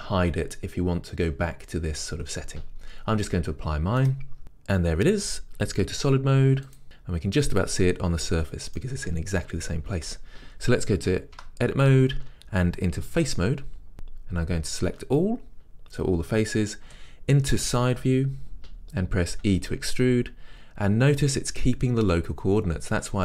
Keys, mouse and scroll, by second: 4.2 click, 4.4-7.2 middle drag, 6.8 z, 11.6 Tab, 13.4 3, 13.9 a, 17.0 KP_3, 19.6 e.